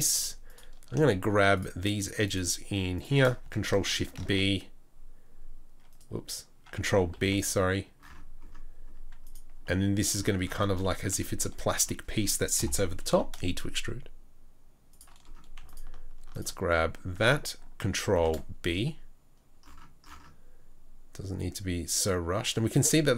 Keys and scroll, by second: 0.1 2, 7.3 ctrl+b, 12.6 ctrl+l, 13.1 ctrl+l, 13.1 e, 18.0 ctrl+b.